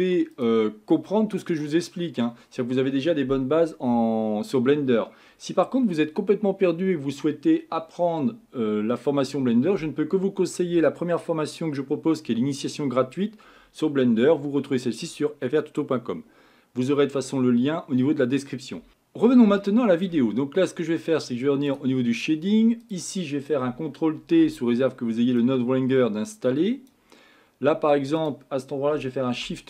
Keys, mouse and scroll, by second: 0.4 click, 1.1-2.3 middle drag, 2.3-6.0 scroll up 1.